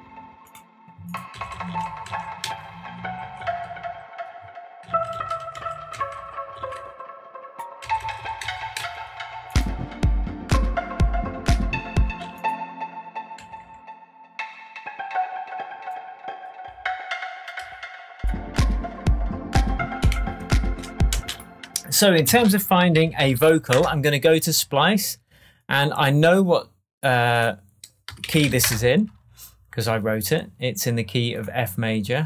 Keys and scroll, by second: 1.3 Down, 4.8 Down, 7.8 Down, 12.0 space, 13.4 Left, 20.1 shift+Tab, 21.1 shift+space, 22.3 alt+space, 22.8-23.8 typing, 27.8-28.9 typing.